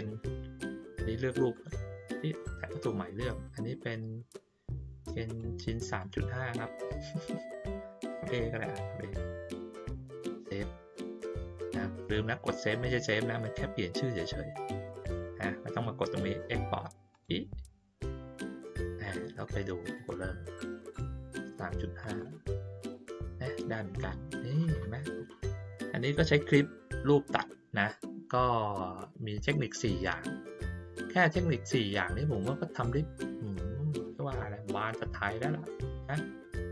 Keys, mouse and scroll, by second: 1.5 click, 5.2 click, 5.9 click, 10.9 click, 17.1 click, 19.8 click, 22.0 click, 22.1 click, 29.5 click, 30.9 click, 31.6-32.1 ctrl+scroll down 1, 32.1 ctrl+scroll down 1, 32.5-34.0 middle drag, 34.9 click.